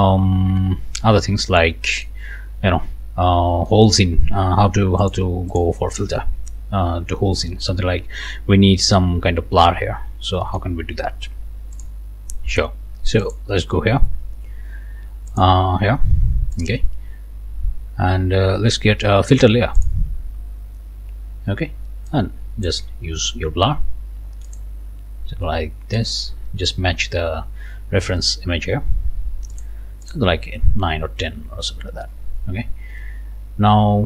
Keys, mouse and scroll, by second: 0.6-2.2 drag, 3.7 click, 5.0 click, 5.5 click, 7.5 scroll down 1, 10.1 scroll up 1, 10.4 click, 11.8 click, 13.2 click, 15.3 click, 16.5 click, 19.8 click, 22.1 click, 24.4 click, 26.0 click, 29.5 click, 30.0 click.